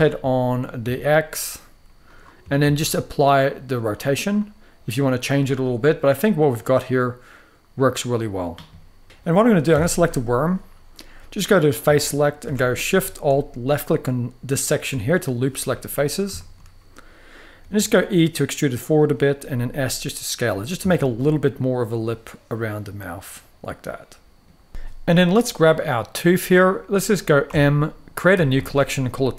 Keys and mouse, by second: 0.5 x, 1.8 drag, 2.3 ctrl+a, 4.1-4.6 middle drag, 5.1-7.9 middle drag, 8.9 middle click, 9.4 Tab, 9.8 middle click, 11.2 click, 11.7 shift+middle click, 12.1 alt+a, 12.4 middle click, 15.6 middle click, 16.1 shift+middle click, 17.6 e, 18.7 click, 19.1 s, 20.2 click, 20.7 Tab, 20.9-24.2 middle drag, 24.6 middle click, 25.4 click, 25.8 middle click, 27.2 m.